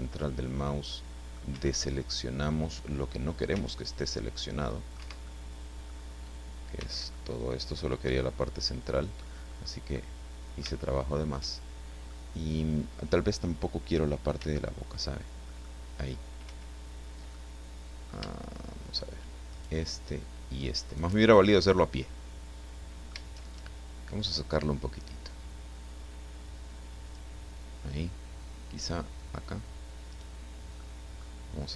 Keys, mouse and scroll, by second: 1.5 Escape, 1.8 middle click, 3.5 c, 4.2 middle click, 5.0 Escape, 5.3 middle click, 6.8 c, 7.1-8.2 middle drag, 8.1 Escape, 8.4-9.4 middle drag, 9.5-9.8 scroll up 1, 9.9-11.4 middle drag, 12.1-13.1 middle drag, 14.4 c, 15.5 click, 16.5 Escape, 17.3 click, 19.5 shift+right click, 20.9 shift+right click, 21.6-23.2 middle drag, 24.1-27.3 drag, 28.8 click, 30.1 right click, 30.7 middle click.